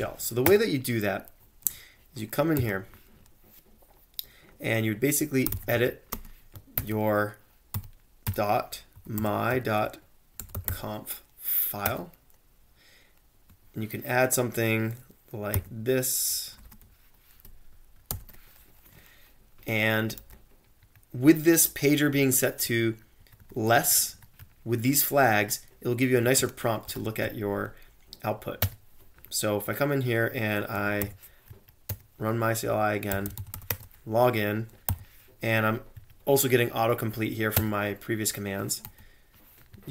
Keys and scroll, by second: 0.0-0.4 typing, 0.5 Return, 2.3-3.0 typing, 5.2-12.4 typing, 13.5 ctrl+c, 13.5 alt+Tab, 15.5-18.6 typing, 20.2 ctrl+c, 20.8 Up, 22.6 Down, 23.2 Left, 23.4 Left, 23.6 Left, 23.8 Left, 24.0 Left, 24.4 Right, 24.9 Right, 25.0 Right, 26.4-27.7 typing, 28.6 Return, 30.5-31.5 typing, 31.9 Return, 32.9-35.4 typing, 36.0 Right, 37.6 Return, 38.6-39.3 typing, 39.7 Right.